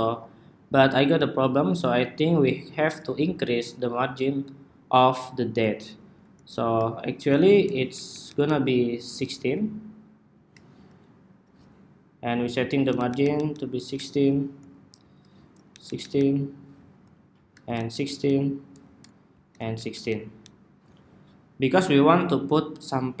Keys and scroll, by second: 7.6 alt+Down, 7.8 alt+Down, 12.7 alt+Down, 12.8 alt+Down, 13.1 alt+Down, 13.2 alt+Down, 13.7 alt+Up, 15.4 alt+Down, 15.8 alt+Down, 15.9 alt+Down, 17.5 alt+Down, 17.6 alt+Down, 19.5 alt+Down, 19.7 alt+Down, 19.8 alt+Down, 20.2 alt+Down.